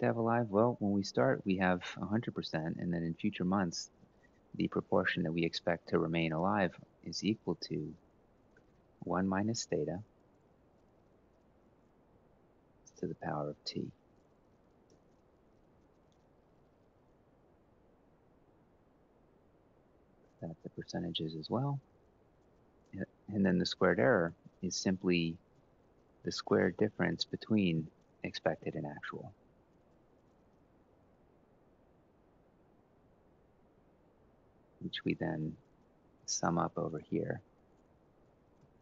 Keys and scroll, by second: 6.5-8.8 typing, 10.7 F4, 11.6-12.3 typing, 14.6 Return, 15.1 Up, 15.8 ctrl+c, 16.0 shift+Down, 16.2 shift+Down, 16.4 shift+Down, 16.5 shift+Down, 16.7 shift+Down, 16.9 shift+Down, 17.1 shift+Down, 17.3 ctrl+v, 23.2-27.5 typing, 27.7 Return, 28.3 Up, 28.5 ctrl+c, 28.7 shift+Down, 28.9 shift+Down, 29.1 shift+Down, 29.2 shift+Down, 29.4 shift+Down, 29.6 shift+Down, 29.7 shift+Down, 30.2 ctrl+v, 34.4-36.8 typing, 38.1-38.8 typing.